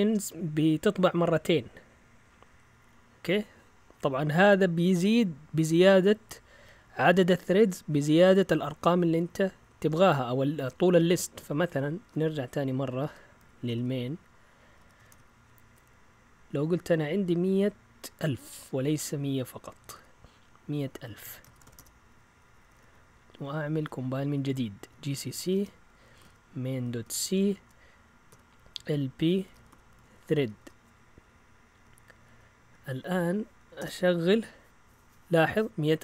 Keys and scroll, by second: 2.5 Up, 7.1 Left, 10.0 Up, 10.5 Down, 10.7 Down, 10.9 Down, 11.7-19.9 typing, 21.2 Escape, 21.3-23.0 typing, 23.5 Down, 23.7 Down, 23.8 Down, 24.0 Down, 24.9-34.3 typing.